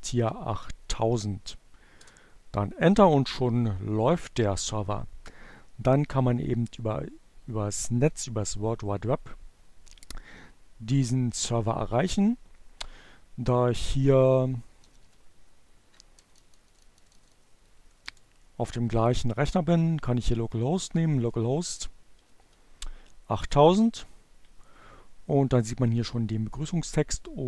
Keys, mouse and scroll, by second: 0.8 Return, 10.0 click, 13.2-14.1 typing, 15.2 Down, 15.7 BackSpace, 18.8 BackSpace, 19.8 BackSpace, 21.3 0.